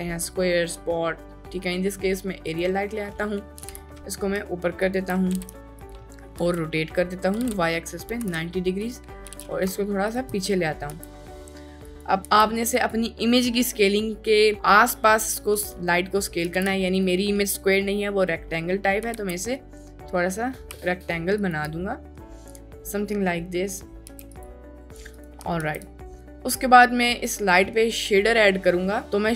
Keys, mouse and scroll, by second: 3.6 g, 5.3 r, 6.1 middle click, 6.4-8.2 typing, 9.3 g, 9.3 x, 10.1 ctrl+drag, 10.4 middle drag, 10.9 s, 12.3 s, 16.5 s, 16.6 x, 19.0 s, 19.2 y, 22.5-22.9 middle drag, 23.1 middle drag, 24.1 s, 25.2 right drag, 25.7 ctrl+s.